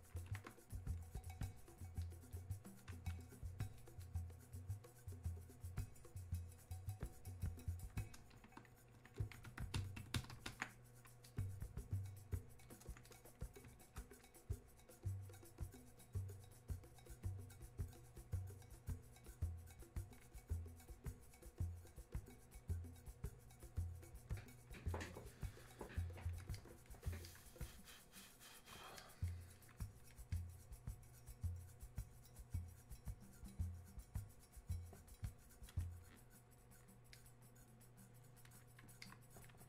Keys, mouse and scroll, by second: 11.3-16.4 drag, 20.4-39.6 drag.